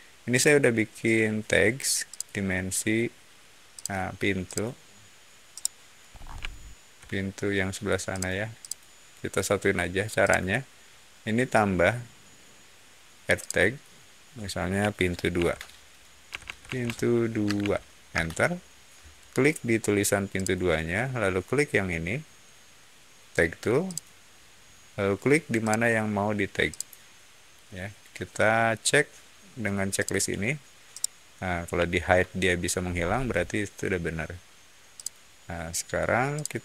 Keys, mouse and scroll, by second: 0.2 shift+click, 2.0 shift+click, 3.7 shift+click, 4.4 click, 5.4 middle click, 6.0 scroll down 1, 6.3-6.8 middle drag, 8.0 click, 8.5 click, 10.1 click, 13.3 shift+click, 15.3-17.5 typing, 18.0 Return, 20.3 click, 23.8 click, 26.6 click, 29.9 click, 30.8-32.5 middle drag, 32.8 scroll up 1, 34.9 shift+click, 36.3 shift+click.